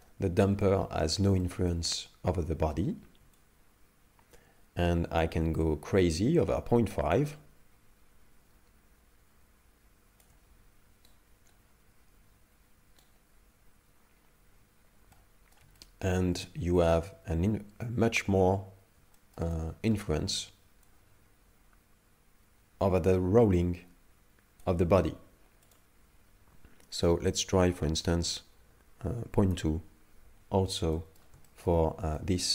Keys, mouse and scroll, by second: 0.0 shift+middle click, 0.6 middle click, 1.4 shift+middle click, 3.4 shift+click, 11.2 right click, 15.1 middle click, 15.8 shift+middle click, 16.4 middle click, 19.2 shift+middle click, 19.5 middle click, 20.9 shift+click, 25.7 click, 31.0 middle click, 31.5 shift+middle click, 32.1 middle click.